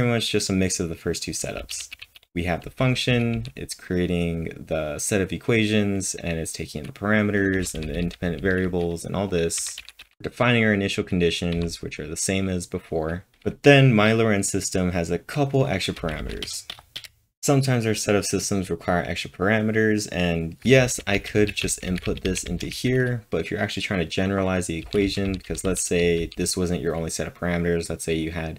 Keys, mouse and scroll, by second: 7.3-8.1 typing, 9.6-10.7 typing, 16.0-17.0 typing, 20.8-22.8 typing.